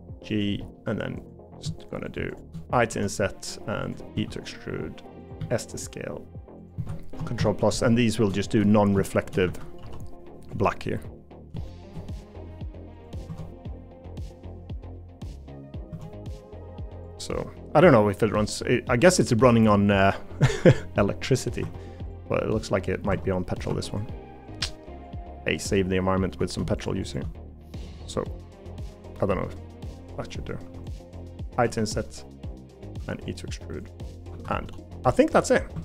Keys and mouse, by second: 0.6 middle click, 4.1 e, 5.4 s, 7.4 ctrl+KP_Add, 8.4 shift+middle click, 9.1 shift+middle click, 9.5 a, 9.8 g, 11.8 shift+middle click, 12.4 g, 13.3 Tab, 13.7 middle click, 14.9 middle click, 15.9 Tab, 16.0 middle click, 17.4 middle click, 17.9 middle click, 20.4 middle click, 21.6 Tab, 22.6 middle click, 23.1 Tab, 23.7 2, 25.4 middle click, 27.8-28.9 drag, 29.1 middle click, 30.6 3, 31.6 i, 33.0 e, 34.3 a, 34.6 g, 35.7 Tab.